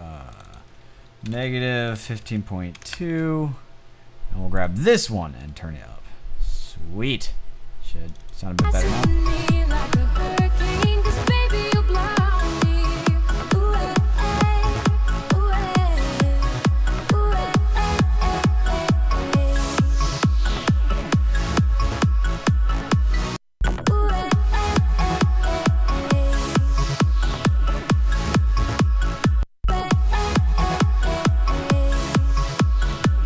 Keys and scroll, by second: 0.6-2.1 typing, 2.2 Return, 5.0 typing.